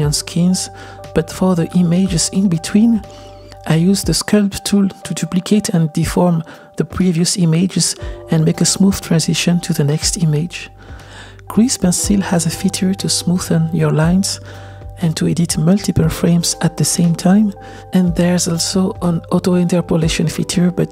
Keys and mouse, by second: 3.4-4.6 drag, 5.1-6.2 drag, 6.6-7.5 drag, 7.7 click, 8.3 click, 9.3 drag, 9.7 click, 9.9-12.2 drag, 12.6-13.1 drag, 13.7-15.6 drag, 16.1 click, 16.8 r, 20.1-20.9 drag.